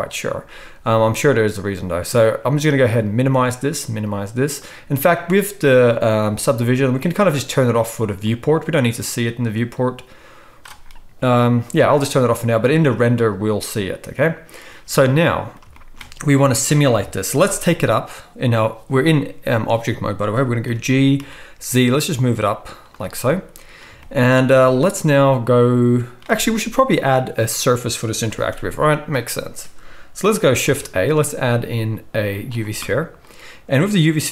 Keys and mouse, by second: 16.9 KP_1, 20.6 g, 22.9-23.2 drag, 23.2 right drag, 23.3-34.3 middle drag, 30.6 shift+a.